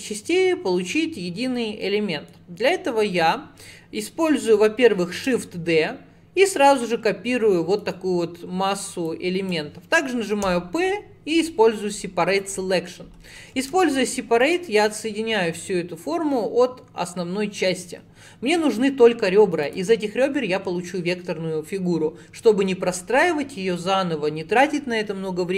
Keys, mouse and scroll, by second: 1.9-4.9 middle drag, 5.2 shift+d, 9.1 click, 10.5 p, 13.8 Tab, 14.5 click, 18.8 click.